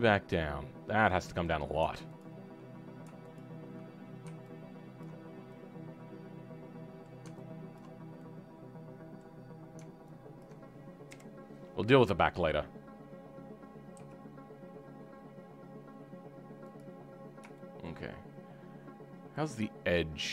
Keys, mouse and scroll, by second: 2.2 alt+click, 3.3 alt+click, 3.8-5.0 scroll down 4, 5.0 ctrl+click, 5.2-5.5 scroll down 2, 5.5-7.7 middle drag, 7.7 ctrl+click, 7.9 scroll down 2, 8.2-9.4 middle drag, 9.4-10.4 scroll up 2, 10.4 ctrl+Left, 11.1 KP_1, 11.5-14.0 scroll up 6, 14.0 g, 17.1-17.5 scroll up 2, 17.5-19.3 shift+middle drag, 19.3-20.3 drag.